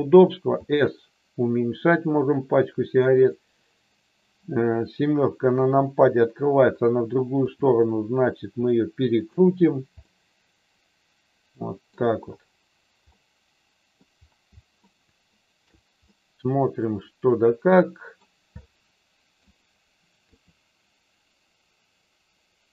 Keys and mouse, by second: 0.6 s, 5.4 KP_7, 7.4 r, 9.9-11.1 middle drag, 11.3 middle click, 11.7 middle click, 13.2 middle click, 14.8 shift+middle click, 15.9-18.2 middle drag, 18.5 middle click, 20.3 r.